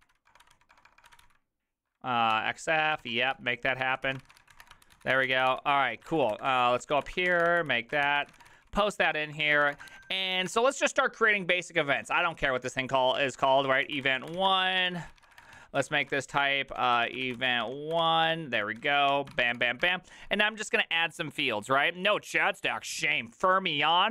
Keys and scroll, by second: 0.0-5.0 typing, 5.1 ctrl+h, 5.1 ctrl+t, 5.2 ctrl+h, 5.3 ctrl+t, 5.3 ctrl+h, 5.4 ctrl+t, 5.5 ctrl+h, 6.1 ctrl+c, 6.3-11.0 typing, 12.3-20.1 typing.